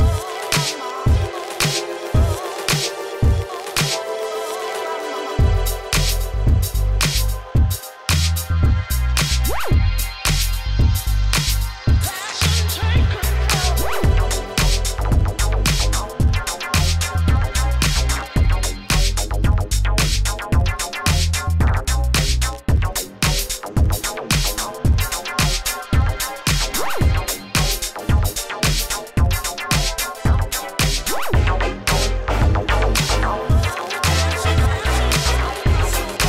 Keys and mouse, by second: 2.0-3.0 drag, 5.6-6.8 drag, 6.8 s, 7.8 s, 13.9 s, 15.3 s, 16.0 shift+f, 24.4 s, 27.6-31.3 drag, 31.5 click, 32.3-34.9 typing, 35.2 click, 35.4 click.